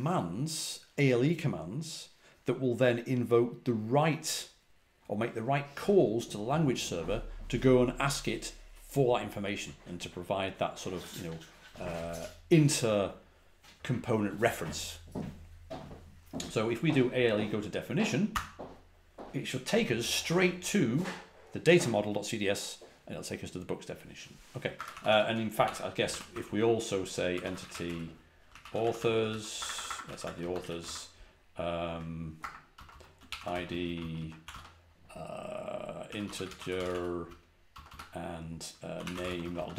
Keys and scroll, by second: 18.2 typing, 24.6-31.0 typing, 31.8 Tab, 32.3-34.3 typing, 35.7-39.7 typing.